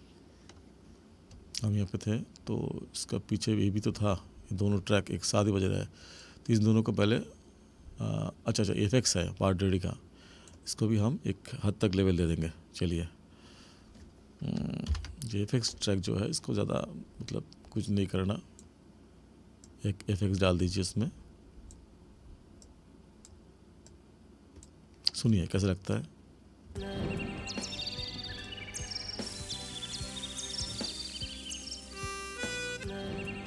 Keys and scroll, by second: 14.8 ctrl+=, 26.7 space.